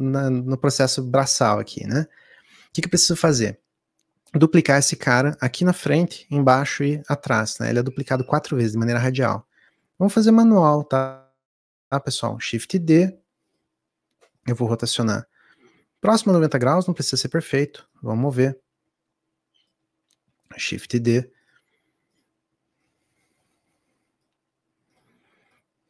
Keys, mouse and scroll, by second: 2.6 scroll down 3, 10.5 shift+d, 14.3 click, 24.3 click.